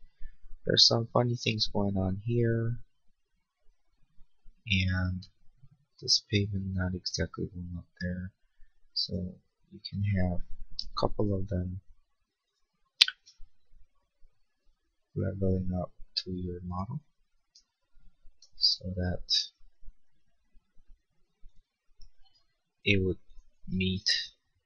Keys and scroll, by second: 10.9 m.